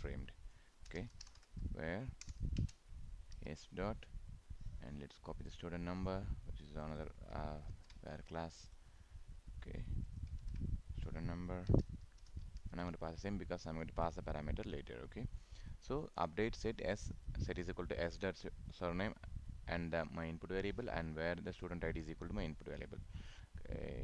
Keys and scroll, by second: 7.7 ctrl+c, 10.4 ctrl+v.